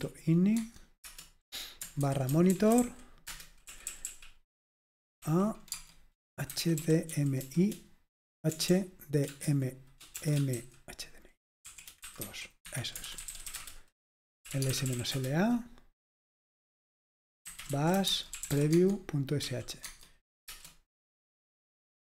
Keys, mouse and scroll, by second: 0.6 Tab, 1.0 Return, 1.8-21.0 typing.